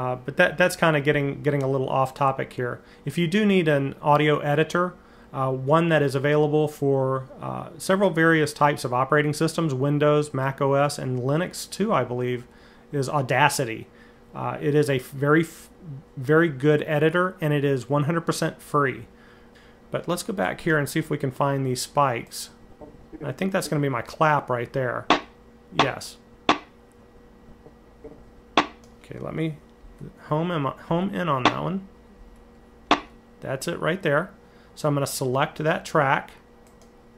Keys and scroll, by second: 29.6 Left, 30.1 Left, 30.7 Right, 31.2 Right, 32.0 Left, 32.7 Right.